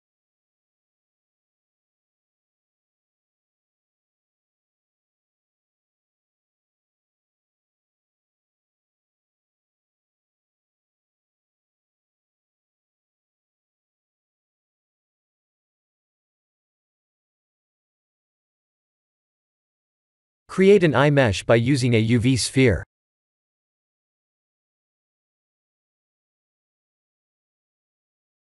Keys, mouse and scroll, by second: 5.9 Tab, 6.3 scroll up 5, 7.6 scroll down 2, 8.7 click, 9.0 right click, 10.4 click, 10.8 Tab, 11.4 click, 12.0 shift+z, 12.3 click, 12.4 b, 14.3 s, 18.9 Tab, 19.2 middle click, 21.3 KP_1, 23.1 click, 23.9 shift+a.